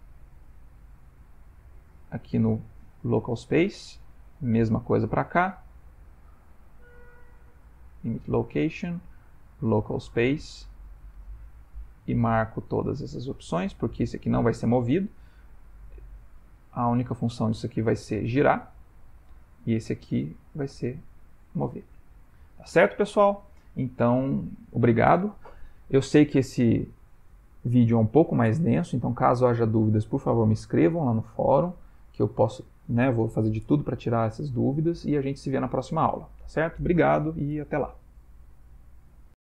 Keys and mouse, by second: 0.0 click, 0.6 click, 1.2 click, 1.6 click, 2.0 click, 4.5 click, 6.0 click, 9.5 click, 11.5 click, 12.0 click, 12.3 click, 12.7 click, 13.2 click, 13.6 click, 14.2 g, 16.2 click, 16.5 r, 18.4 click, 18.8 r, 20.0 click, 20.4 g, 22.3 ctrl+middle click, 22.8 ctrl+middle click, 22.9 shift+middle click, 23.1 shift+middle click, 23.7 middle click, 23.9 middle click, 25.6 shift+middle click.